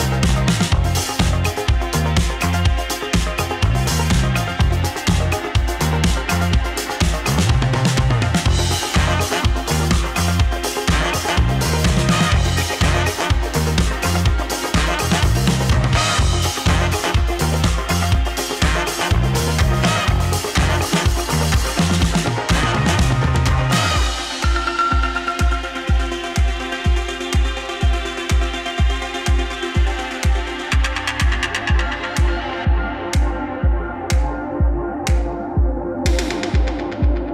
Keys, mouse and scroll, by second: 3.6-18.4 drag.